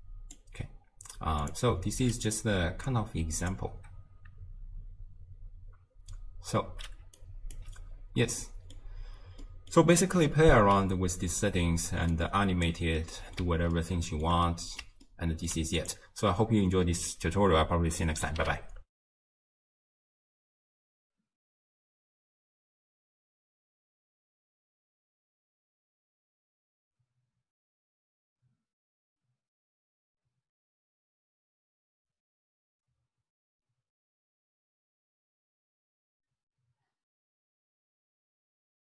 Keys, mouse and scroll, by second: 1.4 click, 2.3 click, 2.9 click, 7.0 d, 7.2 right click, 7.6 d, 8.0-8.4 scroll down 1, 8.4-12.1 middle drag, 12.1 click, 13.0-15.8 middle drag, 15.8 click.